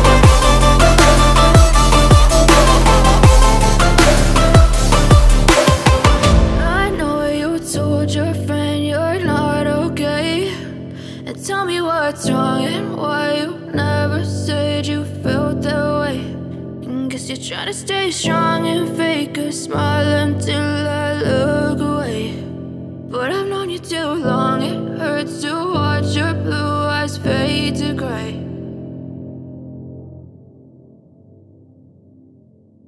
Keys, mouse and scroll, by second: 11.7 ctrl+click, 16.9 click.